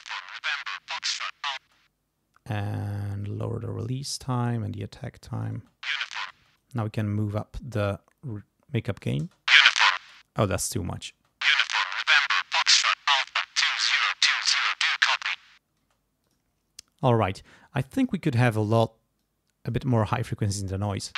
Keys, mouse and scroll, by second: 1.6 space, 3.2 click, 4.2-5.6 drag, 5.6 space, 6.3 space, 6.6-9.2 drag, 9.2 space, 10.0 space, 10.2 click, 11.2 space, 15.8 space, 16.2 click, 17.9 click, 19.2 click, 20.9 space.